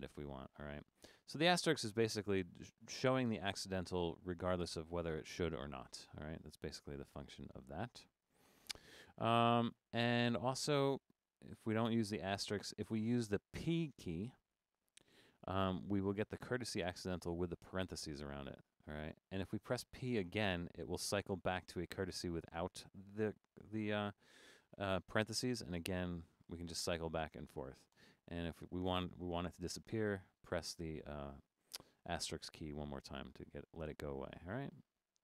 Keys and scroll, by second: 3.1 *, 3.5 Right, 3.7 Right, 3.8 Right, 4.0 Right, 4.1 Right, 4.4 Right, 4.9 Right, 9.9 Right, 10.1 Right, 10.4 Right, 10.7 Right, 11.3 Left, 11.5 *, 14.8 p, 19.8 Down, 20.5 p, 25.8-28.0 typing, 30.1 *, 34.8 p.